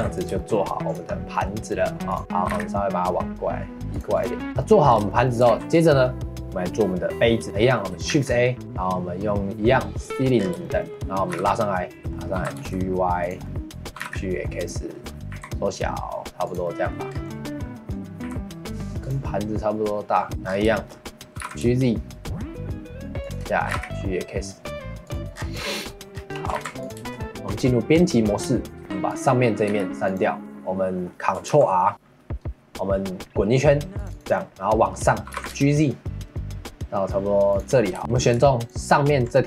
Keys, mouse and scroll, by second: 0.4 shift+middle click, 0.8 click, 1.3 middle click, 2.1 click, 2.4 g, 4.1 click, 4.4 shift+middle click, 4.8 scroll down 4, 5.1 shift+middle click, 5.5 ctrl+s, 7.4 middle click, 8.1 shift+a, 10.4 scroll down 1, 10.6 shift+middle click, 11.3 g, 12.0 middle click, 12.3 g, 13.4 middle click, 13.9 g, 14.9 middle click, 15.3 s, 16.6 middle click, 17.1 scroll down 2, 17.3 middle click, 18.2 s, 19.2-20.3 middle drag, 20.3-20.7 scroll up 8, 20.7 shift+middle click, 21.3 g, 23.7 g, 25.3 scroll down 3, 25.6 middle click, 26.1 scroll down 2, 26.3 middle click, 26.5 ctrl+s, 27.0 shift+middle click, 27.5 Tab, 28.8 3, 29.1 click, 29.4 middle click, 29.7 x, 30.4-31.5 middle drag, 31.5 ctrl+r, 34.3 middle click, 35.3 g, 38.0 shift+middle click, 38.6 alt+click.